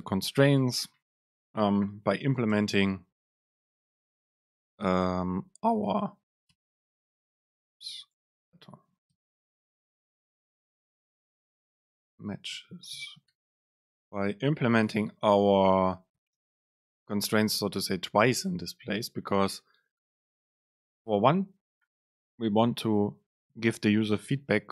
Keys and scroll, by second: 2.3 shift+Left, 2.7 BackSpace, 3.1 super+v, 4.4 BackSpace, 5.1 BackSpace, 5.3 super+space, 7.7 BackSpace, 8.2 Right, 8.6 BackSpace, 9.3 Return, 10.9 super+space, 14.1 BackSpace, 24.6 ctrl+shift+super+F9.